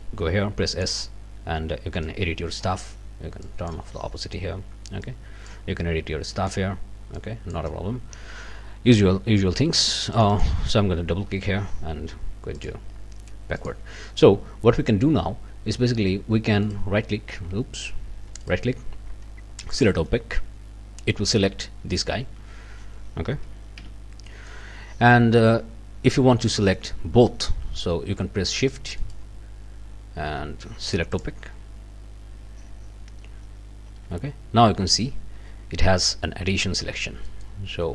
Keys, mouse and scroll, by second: 0.8 click, 2.0 click, 3.4 click, 5.0 click, 6.3 click, 7.2 click, 10.1 click, 12.6 click, 13.6 click, 16.6 right click, 17.6 Escape, 18.4 right click, 19.7 click, 23.8 b, 24.3 click, 29.1 shift+right click, 31.1 shift+right click, 34.1 b, 34.8 scroll up 2, 36.0 scroll down 2, 36.8-37.1 scroll down 2, 37.3 middle click, 37.8 scroll up 2.